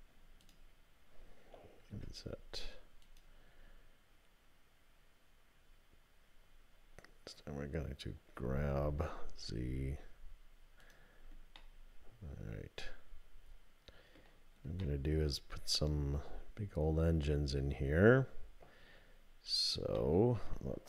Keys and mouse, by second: 8.4 g, 11.6-14.2 drag, 14.8-17.9 middle drag, 20.0 middle click.